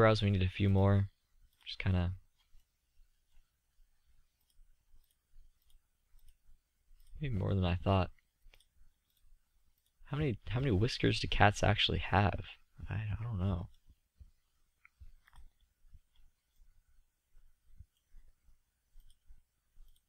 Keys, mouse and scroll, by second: 1.7 click, 3.7-7.8 middle drag, 7.8 click, 11.6-12.7 middle drag, 14.1-16.5 middle drag, 17.6-18.6 middle drag.